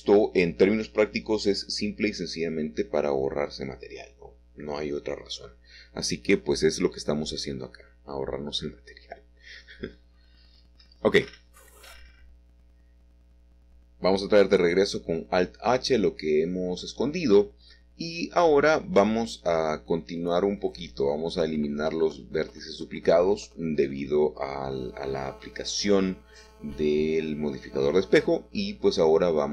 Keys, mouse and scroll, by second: 1.6 click, 1.6 typing, 2.2 Escape, 2.9 e, 4.2 y, 5.5 Escape, 5.7 middle click, 6.7 ctrl+z, 7.4 e, 7.7 x, 11.8 click, 12.0-13.1 middle drag, 13.4-14.4 scroll down 1, 14.4-14.9 scroll down 1, 14.9 alt+h, 17.1-18.3 scroll up 2, 18.3 a, 18.5 a, 19.0-20.0 drag, 20.0 l, 21.1 m, 21.8 click, 23.1 middle click, 24.6 1, 25.2 middle click, 26.0 shift+middle click, 26.1 shift+scroll up 1, 27.9 middle click, 28.8 shift+middle click.